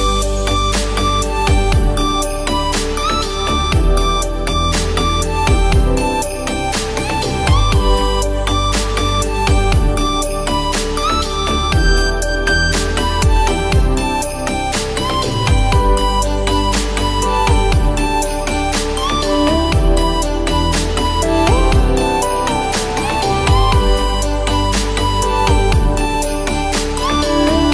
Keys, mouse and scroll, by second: 0.2 click, 1.3 click, 9.7 click, 11.2-17.7 drag, 17.7-26.6 drag, 25.1-26.6 drag, 26.8-27.7 drag.